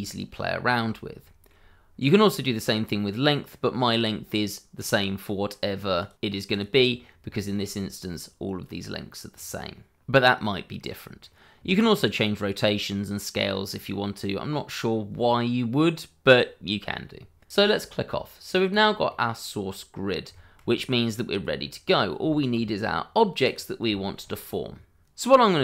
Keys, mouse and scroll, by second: 0.0 shift+middle click, 0.6-1.1 scroll up 1, 1.2 shift+middle click, 3.5 middle click, 4.7 click, 7.3 shift+middle click, 10.7 middle click, 17.5 click, 17.5 middle click, 18.7 click, 19.1 middle click, 20.7-21.1 scroll up 1, 21.1 middle click, 22.0 scroll down 1, 22.3 shift+middle click, 23.4 click, 24.2-25.1 scroll up 1, 25.3 shift+a, 25.3 click, 25.5 shift+click.